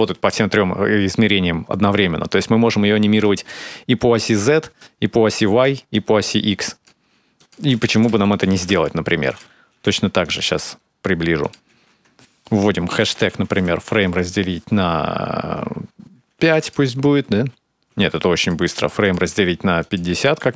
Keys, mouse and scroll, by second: 2.1 shift+click, 4.6 shift+click, 5.7 shift+click, 7.2 click, 8.1 click, 8.5 click, 9.1 click, 10.4-11.2 scroll up 5, 11.2 click, 11.2 scroll up 4, 16.9 space, 17.7 space, 18.2 click, 18.8 click.